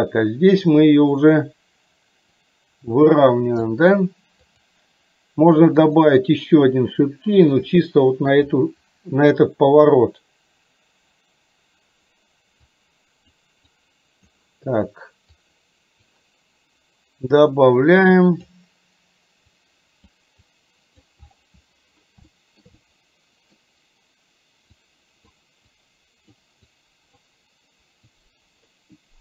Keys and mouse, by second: 2.5-3.7 drag, 5.8 click, 7.8 middle click, 12.7 click, 13.8 click, 15.5 click, 17.4-18.6 drag, 19.7 click, 20.7 click, 22.4 shift+middle click, 22.7 middle click, 24.7 click, 25.8 click, 26.7 click, 28.2 click.